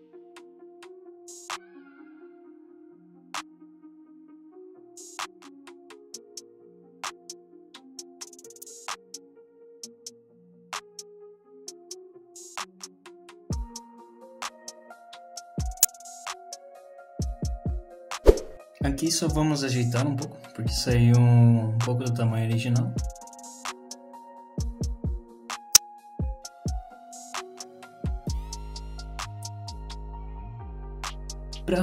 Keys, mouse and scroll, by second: 0.0 click, 0.7 click, 1.2 middle click, 1.5 scroll down 1, 1.6 middle click, 2.3 middle click, 2.4 click, 3.1 click, 3.5 middle click, 3.6 scroll down 1, 3.7 middle click, 3.9 z, 4.1 middle click, 4.5 click, 5.3 click, 5.3 middle click, 5.6 click, 6.3 click, 6.9 middle click, 7.4 click, 8.0 middle click, 8.8 click, 9.1 click, 9.6 click, 10.0 click, 10.5 click, 10.7 middle click, 10.9-11.2 scroll down 3, 11.1 middle click, 11.7 click, 12.3 click, 13.1 click, 13.7 KP_1, 14.5 middle click, 15.1 click, 15.8 middle click, 16.4 click, 16.7 middle click, 17.1 click, 17.3 middle click, 18.5-19.2 scroll up 3, 19.2 click, 20.5 g, 21.3 click, 21.6 click, 23.0 g, 23.9 click, 24.8 click, 25.1 click, 26.5 g, 27.4 click, 27.6 click, 28.1 g, 29.2 click, 29.4 g, 30.2 click, 30.7 click, 31.1 middle click, 31.7 ctrl+r.